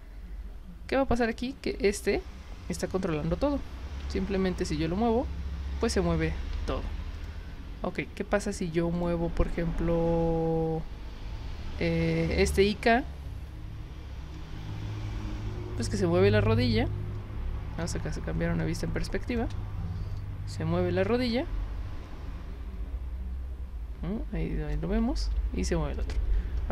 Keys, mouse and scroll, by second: 1.2 click, 4.0 w, 6.5 ctrl+z, 7.1 click, 9.0 click, 12.5 click, 17.9 space, 18.6-19.4 drag, 20.2-24.7 alt+drag, 25.2 ctrl+z, 25.9 click.